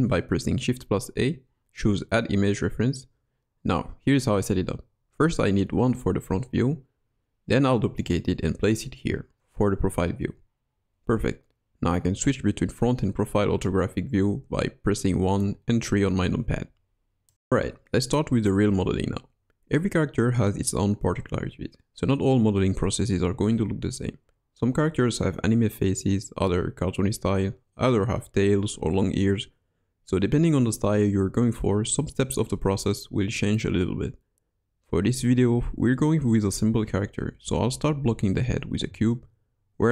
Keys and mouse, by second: 3.4 KP_Decimal, 3.4 r, 6.4 KP_1, 6.8 KP_Decimal, 7.8 shift+d, 9.3 g, 16.0 KP_1, 19.6 shift+a, 23.8 click, 33.5 click, 36.4 middle click, 36.6 KP_1.